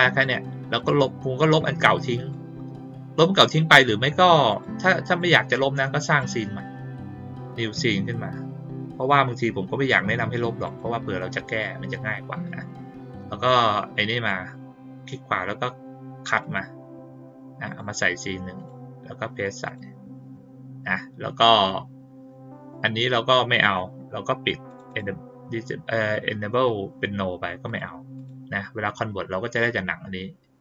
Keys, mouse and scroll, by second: 0.7-2.2 drag, 4.4 click, 5.1 click, 6.0 right click, 10.6 click, 14.1 right click, 16.3 click, 17.6 click, 18.5 right click, 19.6 click, 20.8 click, 22.6 click, 24.6 click, 24.8 click, 27.6 click, 28.1 click.